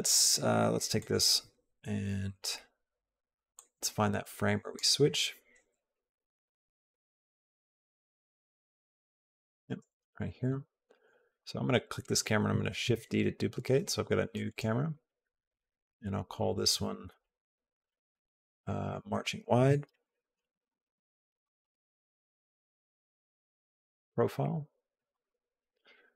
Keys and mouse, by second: 0.8 click, 3.4-4.6 drag, 5.6 Left, 5.7 Left, 6.1 Left, 6.2 Left, 6.4 Left, 6.6 Left, 6.8 Left, 7.0 Left, 7.2 Left, 7.4 Left, 7.6 Left, 7.9 Right, 8.1 Right, 8.6 Left, 9.0 Right, 11.1 click, 12.7 shift+d, 14.3 click, 15.2 click, 15.4-24.3 drag, 25.1-26.1 drag.